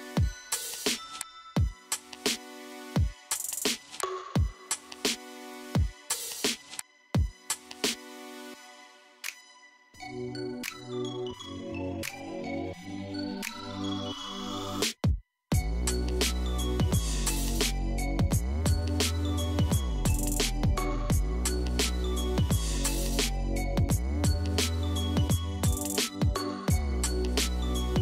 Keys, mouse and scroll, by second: 1.7 click, 3.3 click, 4.5 click, 6.0 KP_1, 7.3-11.2 shift+middle drag, 12.4 click, 13.8 g, 16.1 g, 23.8-26.7 middle drag, 26.7-27.3 scroll down 3, 27.3-28.0 middle drag.